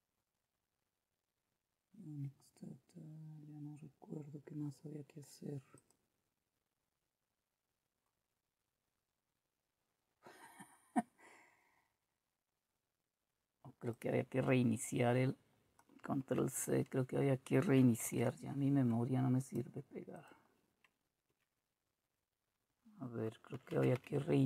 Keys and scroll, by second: 16.4 ctrl+c, 24.0 Return.